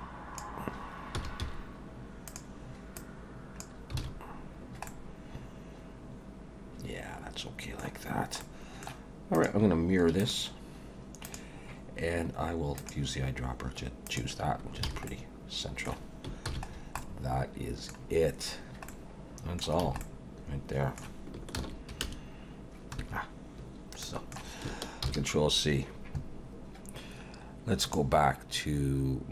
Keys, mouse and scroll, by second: 1.1 s, 3.0 click, 4.0 alt+a, 4.5 scroll down 2, 4.9 middle click, 8.4 middle click, 9.3 click, 10.2 click, 12.8 click, 14.8 alt+a, 15.1 middle click, 16.5 ctrl+s, 16.7-17.2 scroll down 3, 17.0 middle click, 18.6 scroll down 2, 18.9 middle click, 19.8 a, 20.0 middle click, 21.6 ctrl+s.